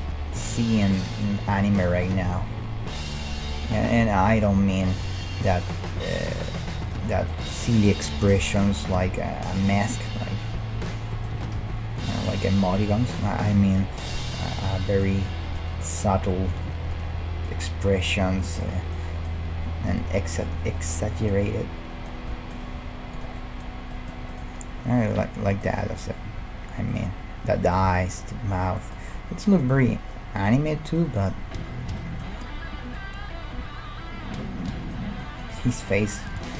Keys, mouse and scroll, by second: 0.5 e, 2.3 e, 3.4 e, 5.5 middle click, 6.0-8.2 right drag, 8.1-9.5 middle drag, 8.1 g, 9.8 middle click, 10.5-12.2 right drag, 11.3 g, 14.6 g, 17.1-28.6 middle drag, 17.5 right click, 19.5 g, 22.8 g, 28.8-35.0 middle drag, 35.0 scroll down 1, 35.2-36.5 middle drag, 36.3-36.5 right drag.